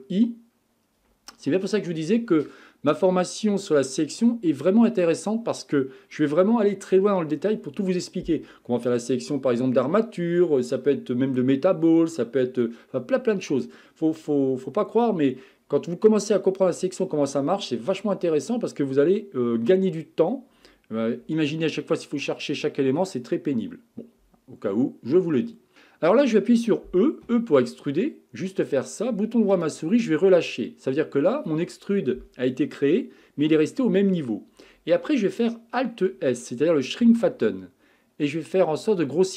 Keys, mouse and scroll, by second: 5.3-5.7 scroll down 2, 5.7-8.7 scroll up 1, 21.8-24.8 middle drag, 27.3 e, 37.0 alt+s.